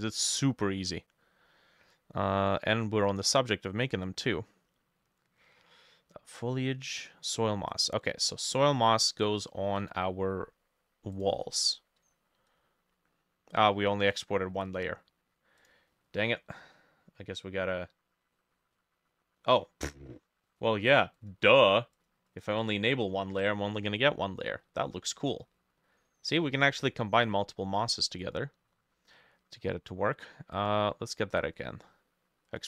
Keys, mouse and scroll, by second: 7.7-10.9 drag, 8.6-9.5 scroll up 12, 22.3 double click, 22.6 double click, 23.3 ctrl+s, 23.4 ctrl+d.